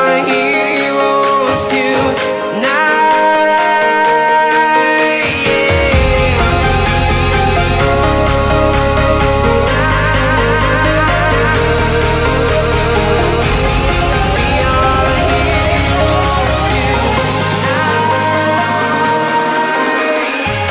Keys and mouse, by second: 1.3 click, 2.1 middle click, 2.7 middle click, 4.6 middle click, 5.3 middle click, 6.3 middle click, 7.4 middle click, 9.4 middle click, 10.2 click, 10.4 middle click, 10.7 click, 11.4 middle click, 11.8 click, 12.8-14.1 drag, 14.3 click, 14.8 middle click, 15.6-16.8 middle drag, 16.9 middle click, 17.9 middle click, 18.6 middle click.